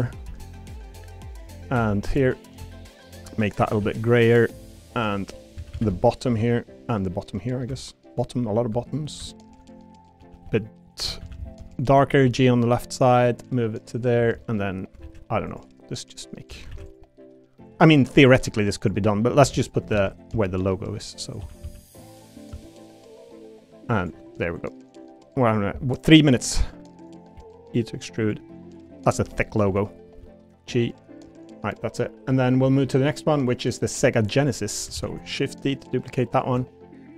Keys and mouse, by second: 0.2 ctrl+r, 1.3 click, 1.7 3, 2.7 shift+click, 3.0 shift+click, 3.6 a, 3.8 g, 4.7 click, 5.6 a, 5.7 a, 6.8 middle click, 7.1 a, 7.4 middle click, 8.1 shift+click, 8.9 ctrl+shift+click, 9.3 middle click, 10.2-12.2 typing, 10.8 right click, 13.2 click, 13.6 middle click, 14.4 middle click, 15.0 ctrl+r, 16.7 ctrl+r, 18.3 middle click, 18.8 click, 19.4 3, 19.6 click, 19.9 shift+d, 20.1 right click, 20.3 s, 21.4 s, 21.6 z, 22.2 click, 22.5 s, 26.7 click, 27.3 e, 28.7 click, 29.1 l, 29.6 u, 30.1 g, 30.8 click, 34.4 click, 34.9 shift+d, 35.6 click.